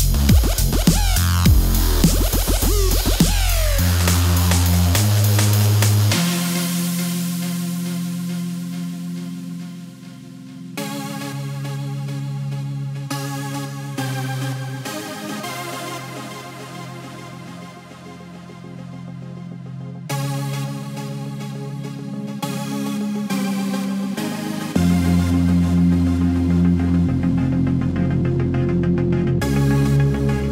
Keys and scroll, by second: 0.0 t, 0.5 r, 2.1 super+s, 4.0-4.7 typing, 7.5 super+s, 14.5 space, 14.6 1, 15.6 t, 17.6 super+z, 19.6 super+s.